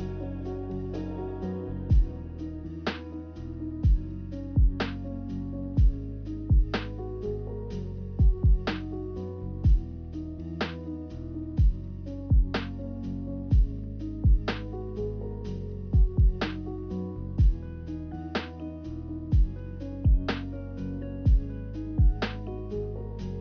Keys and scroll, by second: 5.3 b, 6.4 Delete, 7.1 m, 10.5 a, 12.2 m, 14.6 a, 16.6 ctrl+z, 23.1-23.4 typing.